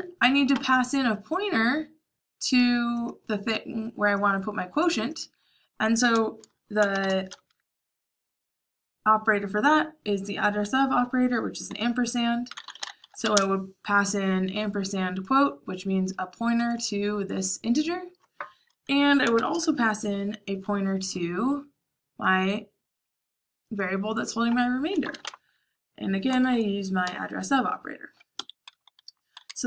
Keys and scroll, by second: 6.8 shift+7, 12.2-13.7 typing, 19.2 shift+7, 24.7-27.0 typing, 28.3 Escape, 29.4-29.6 typing.